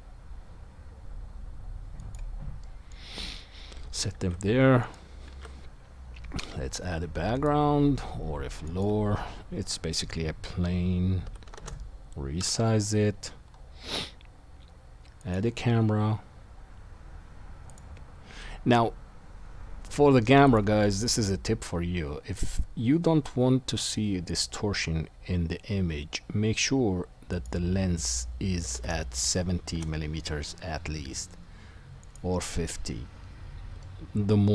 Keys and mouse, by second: 2.1-4.2 drag, 4.2-12.4 shift+right drag, 4.2 shift+a, 5.3 shift+a, 11.2 s, 17.7-20.5 drag, 21.0 click, 24.3 click, 24.9-32.1 drag, 27.3-34.5 middle drag, 27.3-34.5 right drag.